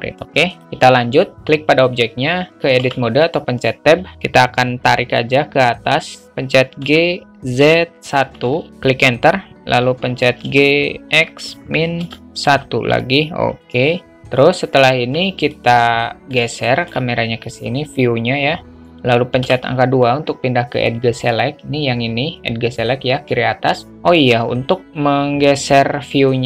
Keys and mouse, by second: 3.2 Tab, 7.1 g, 10.7 g, 15.9 alt+middle click, 16.7 shift+a, 17.0 alt+shift+middle click, 19.7 2, 26.1-26.4 alt+middle drag.